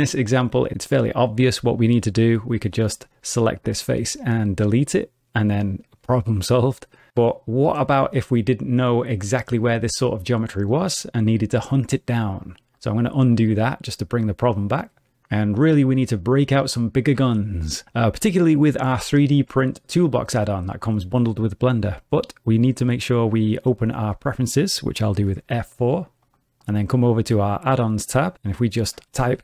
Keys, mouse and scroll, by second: 2.1 3, 2.7 click, 3.8 x, 13.3 ctrl+z, 22.6 middle click, 25.2 F4.